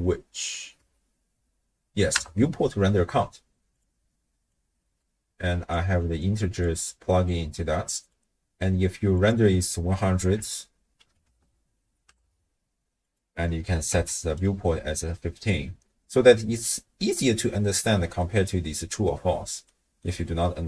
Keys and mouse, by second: 4.5-5.8 drag, 6.2 click, 7.3 click, 7.4 click, 9.2-12.1 drag, 11.4 0, 13.0-14.4 drag, 18.2 middle click, 19.7 middle click.